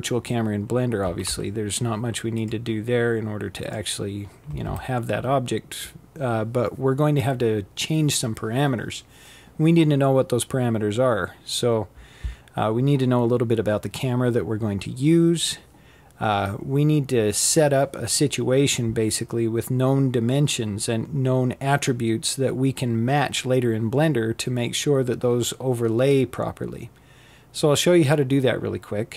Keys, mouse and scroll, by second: 1.0 a, 1.2 a, 2.3 click, 3.5 click, 4.4 a, 4.5 a.